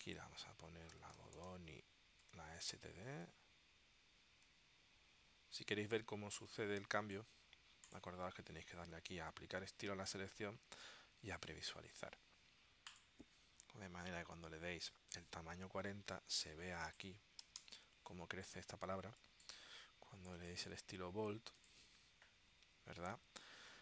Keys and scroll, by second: 0.8-2.3 typing, 2.4 Down, 4.5 Down, 17.3-18.3 typing.